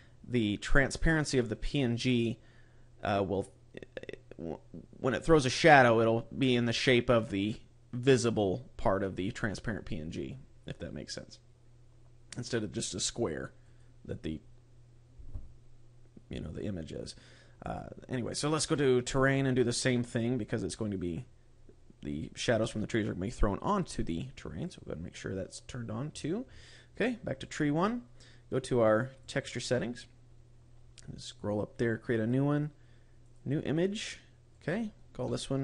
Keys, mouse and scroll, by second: 9.6-12.4 scroll up 14, 13.5 click, 18.4-18.9 scroll down 1, 18.9-21.1 scroll down 12, 21.1-21.5 scroll down 2, 24.5 click, 25.5-27.3 scroll up 16, 27.3 click, 29.1 click, 30.1-31.0 scroll up 11, 31.3 click, 32.0 click, 34.3 click.